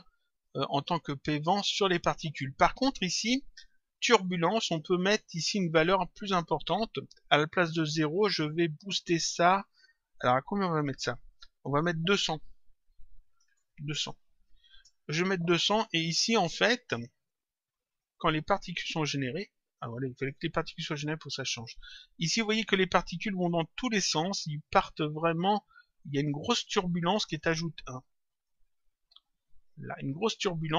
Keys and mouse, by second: 0.5 click, 4.9 click, 8.1 click, 15.6 click, 16.8 click, 19.7 click, 22.8 click, 26.6 click, 28.4 click.